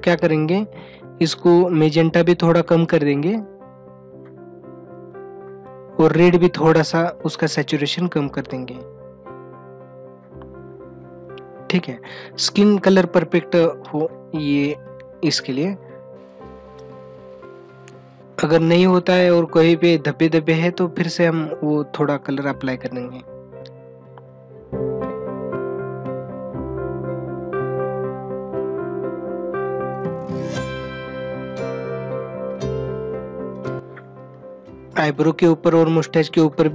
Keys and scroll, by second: 32.4 ctrl+-, 33.4 ], 34.2 ctrl+alt+z.